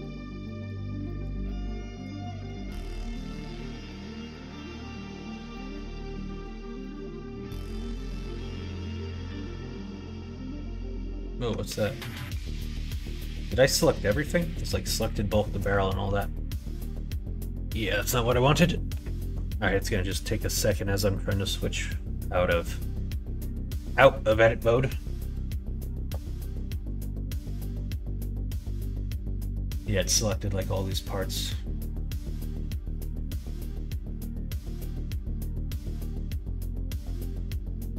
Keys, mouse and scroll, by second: 0.3 middle click, 1.0 middle click, 1.3 middle click, 1.9 middle click, 2.3 shift+middle click, 2.7 middle click, 3.3 middle click, 3.7 click, 3.9 Tab, 4.1 click, 4.4 middle click, 5.4 shift+middle click, 6.2 click, 6.7 middle click, 7.6-8.9 middle drag.